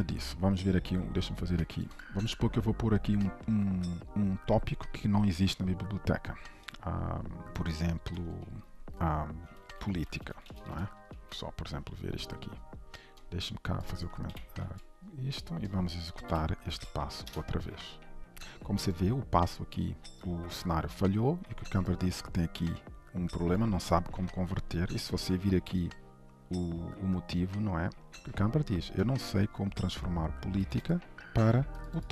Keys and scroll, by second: 11.2 ctrl+s, 14.3 ctrl+/, 14.6 ctrl+s, 16.3 alt+shift+F10.